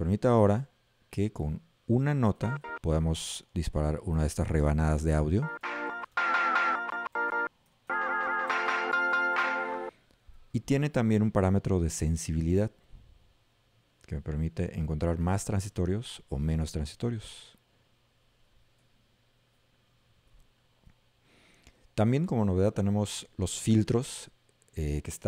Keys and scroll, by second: 2.7 a, 5.4 s, 18.8 s.